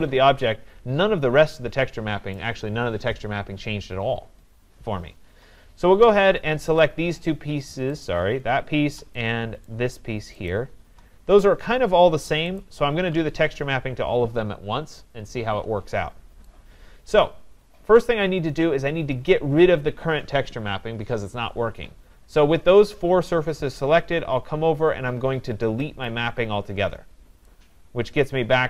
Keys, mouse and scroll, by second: 2.4 right click, 5.3 scroll, 6.1 scroll, 6.8 shift+click, 8.1 shift+click, 9.1 click, 10.5 click, 12.6 click, 15.3 right click, 15.3 scroll, 18.6 right click, 19.1-19.8 scroll, 21.8 scroll, 26.1 click, 27.1 scroll.